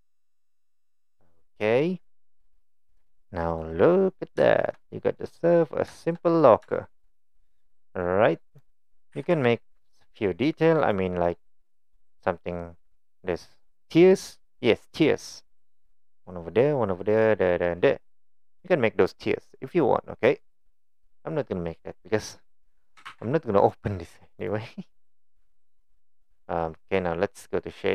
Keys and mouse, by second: 2.6-3.6 middle drag, 4.5 shift+drag, 4.9 middle drag, 5.9 shift+click, 6.8 shift+drag, 8.6 click, 9.2 g, 11.6-12.0 middle drag, 23.1 ctrl+z, 23.7-24.5 drag, 25.1-26.0 middle drag.